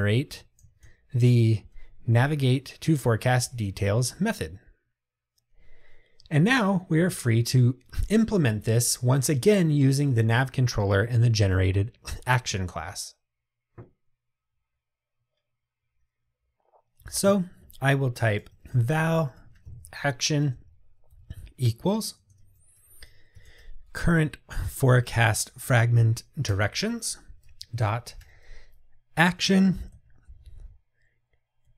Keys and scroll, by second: 2.3 Return, 26.5 Return.